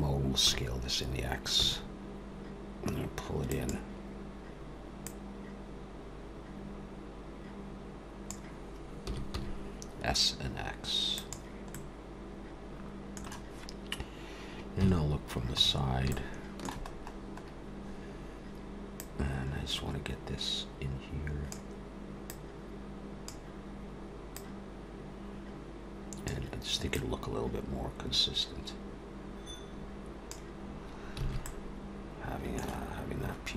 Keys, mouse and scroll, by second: 0.4 s, 5.0 click, 9.1 s, 11.7 middle click, 15.4 KP_3, 15.5-16.1 scroll up 4, 16.1 shift+middle click, 16.9-17.4 scroll up 3, 19.0 click, 22.8 click, 24.3 click, 26.9 click, 31.2 alt+a, 31.4 middle click, 32.9-33.3 scroll down 1.